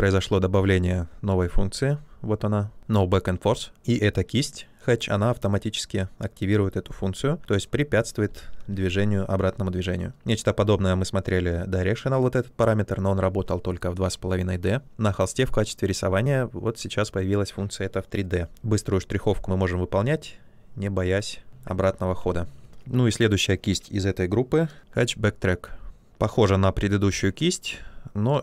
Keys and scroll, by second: 8.3 ctrl+z, 18.6 ctrl+z, 22.0 ctrl+z, 22.7 b.